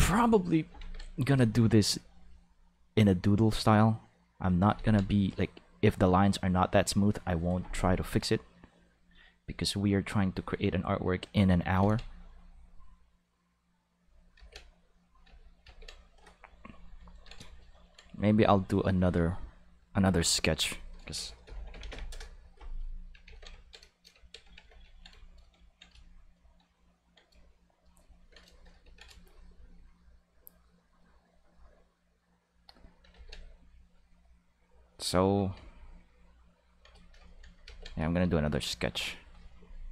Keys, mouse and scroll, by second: 0.7 ctrl+s, 2.4-4.3 drag, 4.7 ctrl+z, 5.3-7.0 drag, 8.8-11.0 drag, 11.8 ctrl+z, 12.3-14.3 drag, 14.3 ctrl+z, 14.4 ctrl+click, 15.2 ctrl+z, 15.6 ctrl+z, 18.9 click, 19.8 click, 20.4 click, 20.6 click, 21.1 shift+s, 21.8 BackSpace, 22.1 Return, 23.2 ctrl+s, 24.5 ctrl+s, 30.6-32.6 drag, 33.1 ctrl+z, 33.4-35.3 drag, 37.6 ctrl+z, 38.3 click.